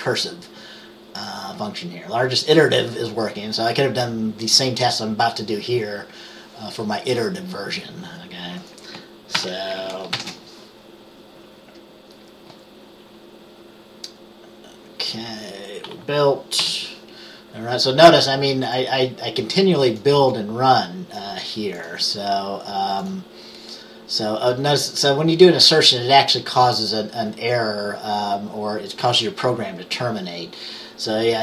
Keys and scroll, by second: 9.5 ctrl+s, 10.2 ctrl+b, 16.7 F5.